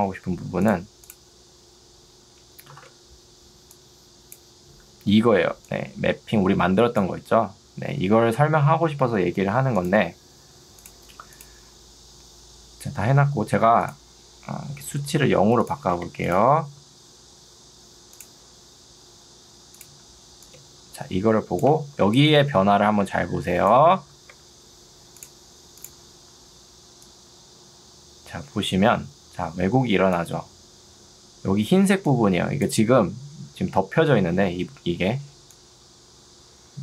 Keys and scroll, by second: 2.8 ctrl+d, 5.4 ctrl+2, 8.6 Escape, 15.0 0, 15.2 Return, 22.0 ctrl+2, 24.4 Escape, 31.6 ctrl+2.